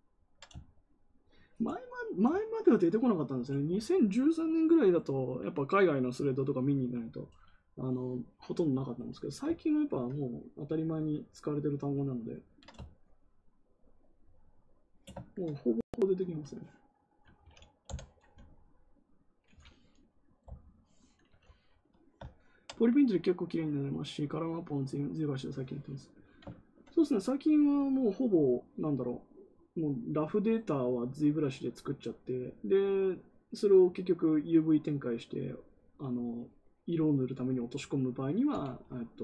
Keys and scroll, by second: 17.8 t, 20.4 t.